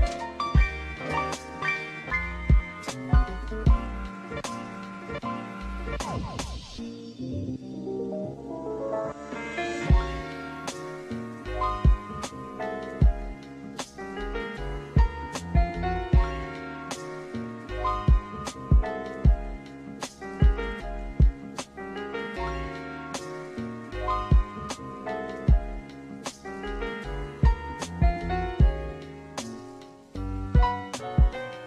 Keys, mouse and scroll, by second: 3.3 KP_0, 4.6 n, 5.6 click, 8.0 click, 10.2-11.9 drag, 13.3 click, 14.5 click, 15.8-16.6 drag, 17.1-21.0 drag, 22.9 click, 23.4 n, 25.5 click, 29.4 click, 31.0 click.